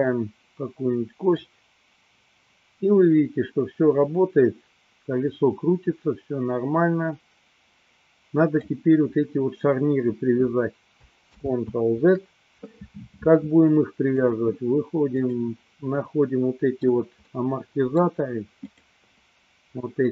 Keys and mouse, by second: 1.5-8.8 drag, 11.4 ctrl+z, 14.1-15.3 drag, 16.1-17.1 middle drag, 17.5 middle click, 18.8 click.